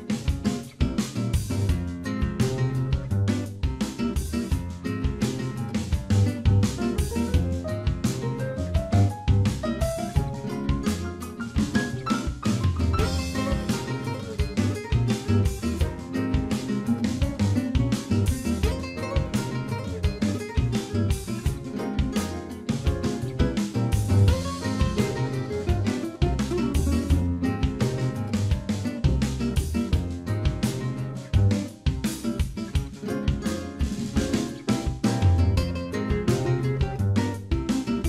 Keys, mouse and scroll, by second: 2.8 click, 3.6 click, 5.3 middle click, 6.3 click, 8.7 middle click, 9.2 scroll up 4, 9.6 shift+middle click, 9.9 middle click, 10.9 shift+click, 19.6 click, 23.3 shift+middle click, 28.1 KP_Divide, 29.0 middle click, 29.4 scroll up 1, 30.3 shift+middle click, 30.3 scroll up 3, 33.8 click, 34.4 shift+middle click, 36.6 click.